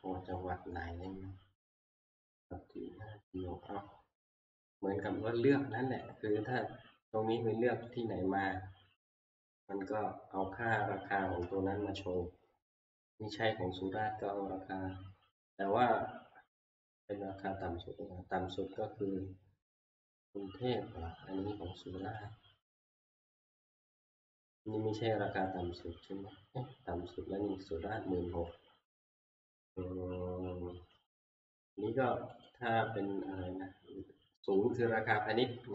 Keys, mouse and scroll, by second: 6.1 click, 8.0 click, 22.2 click, 22.7 Right, 23.0 Right, 23.9 Right, 25.4 click, 26.0 Right, 26.3 Right, 27.4 Right, 27.9 Right, 32.4 click.